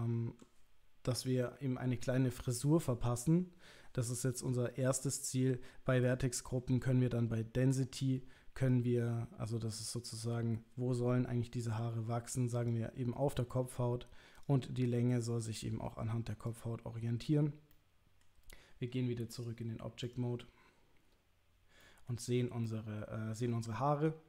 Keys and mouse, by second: 6.1 click, 8.6-12.7 drag, 14.4-16.6 drag, 17.8 middle click, 19.4-21.2 drag, 21.8 middle click, 22.6-23.5 middle drag.